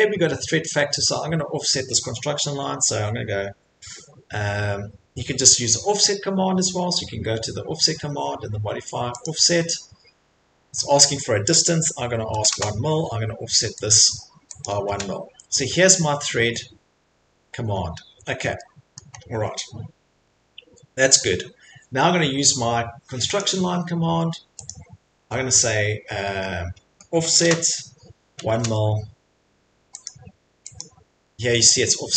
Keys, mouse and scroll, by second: 0.8 middle click, 1.2 middle click, 9.2 click, 12.3 1, 12.5 Return, 13.9 click, 14.6 click, 17.7-18.2 scroll, 18.5 middle click, 19.0 middle click, 19.2 middle click, 19.3 middle click, 20.0 middle click, 20.2 middle click, 20.3 middle click, 23.4 click, 24.7 click, 27.2 o, 28.6 space, 30.8 click, 31.5-32.1 scroll.